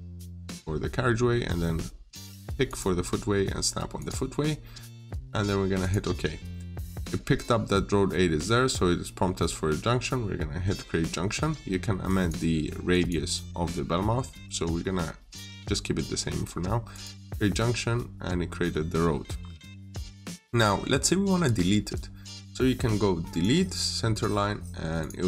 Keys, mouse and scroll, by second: 0.1 click, 17.6 scroll up 1, 18.3 scroll down 1, 18.6 middle click, 19.2 scroll down 1, 19.4 middle click, 23.1 click.